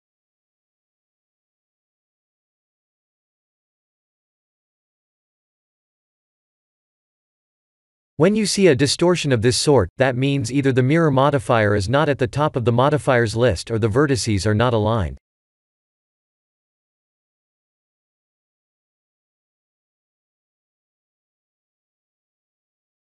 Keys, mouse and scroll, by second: 2.6 3, 2.7 click, 3.2 2, 3.3 click, 4.3 e, 12.8 scroll down 2, 15.0 click, 15.0 scroll down 4, 16.4-18.0 scroll up 6, 18.0-18.9 scroll up 1, 18.9 click, 20.1 Tab.